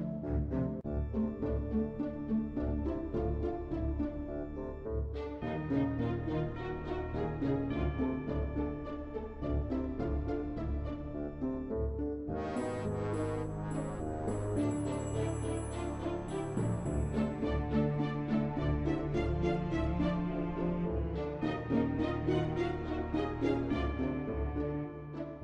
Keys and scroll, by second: 13.0-13.4 typing, 15.0-15.6 typing.